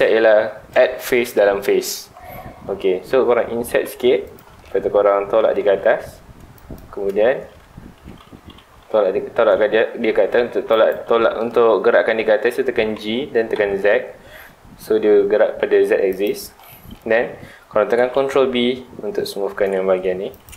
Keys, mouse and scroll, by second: 4.3 click, 4.6 scroll down 2, 4.7 middle click, 5.5 g, 6.7 click, 7.1-7.6 scroll up 2, 7.6 ctrl+z, 8.5 g, 10.9 right click, 11.4 scroll down 1, 12.2-12.5 scroll up 1, 12.9 g, 16.2 click, 16.6-17.9 middle drag, 17.9 ctrl+b, 20.3 scroll up 1, 20.4 click.